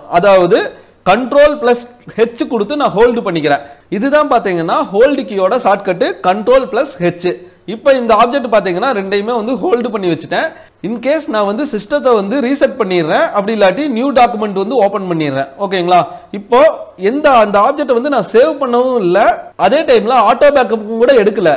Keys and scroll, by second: 1.1 ctrl+h.